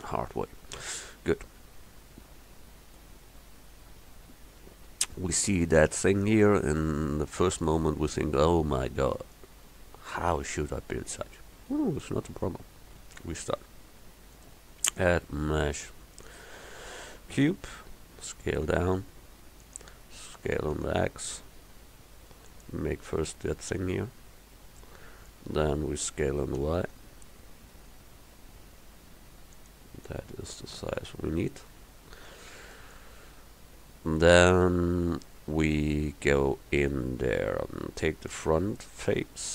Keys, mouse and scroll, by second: 17.6 s, 20.4 s, 26.7 s, 31.8 KP_1, 36.5 Tab.